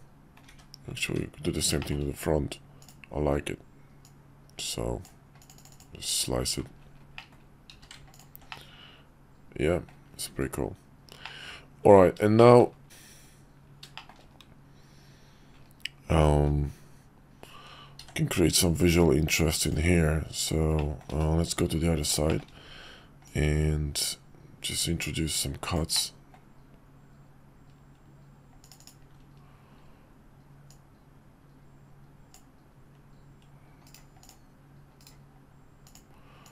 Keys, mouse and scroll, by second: 1.0 `, 2.8 click, 4.0-5.0 drag, 7.2 click, 7.7 q, 8.5-9.9 middle drag, 11.2-12.0 middle drag, 12.4 shift+middle click, 18.0 d, 19.6 click, 20.8 middle drag, 22.3 shift+click, 23.3-28.7 drag, 26.0 typing, 28.2-29.0 typing, 30.7-34.0 drag, 33.7-34.5 typing, 34.2-35.1 drag, 35.9 click, 36.4-36.5 drag.